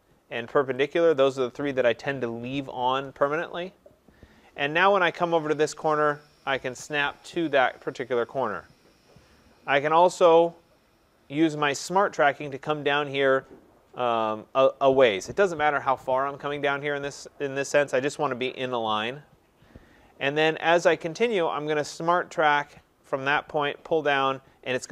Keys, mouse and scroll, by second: 0.9 click, 18.9 click.